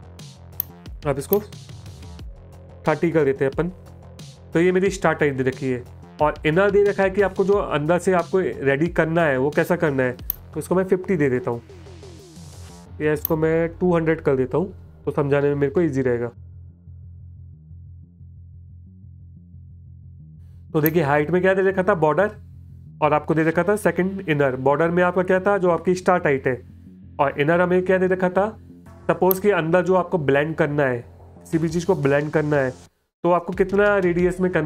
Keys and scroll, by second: 1.6-3.1 typing, 10.8 BackSpace, 11.2 KP_5, 13.3 BackSpace, 15.4 KP_2, 15.7 KP_0, 16.4 KP_0, 19.8 space, 20.5 space, 28.2 space, 29.5 space.